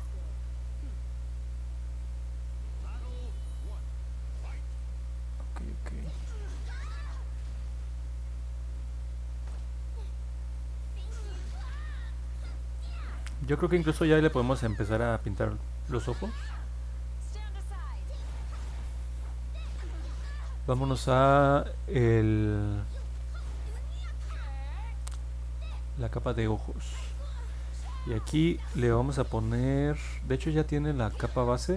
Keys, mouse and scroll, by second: 5.1 middle click, 5.7 middle click, 6.1-9.5 alt+drag, 9.7 middle click, 10.1 middle click, 10.5 alt+click, 11.5 middle click, 12.2 alt+click, 13.1 alt+middle click, 14.0-15.1 alt+drag, 17.3 click, 18.3 click, 22.0 middle click, 22.0-22.5 scroll down 2, 23.0 scroll down 1, 23.5 scroll down 1, 24.1 scroll up 1, 25.0 click, 29.5 click.